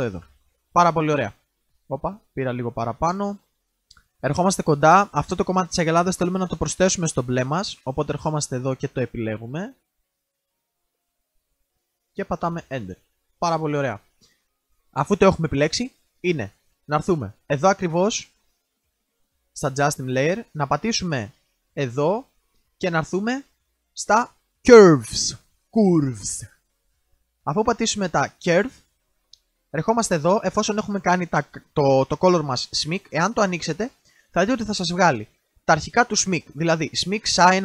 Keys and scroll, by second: 0.1 alt+Return.